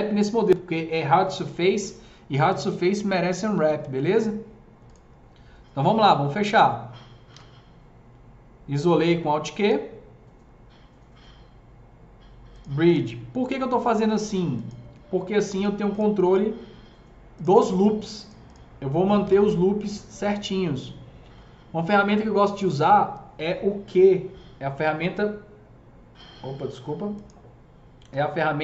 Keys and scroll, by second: 7.2 alt+q, 19.1 q, 24.4 KP_Multiply.